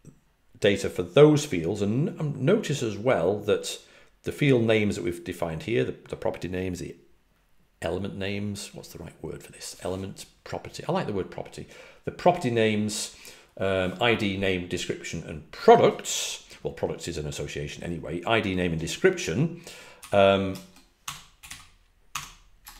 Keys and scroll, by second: 19.9 typing, 21.0-22.7 typing.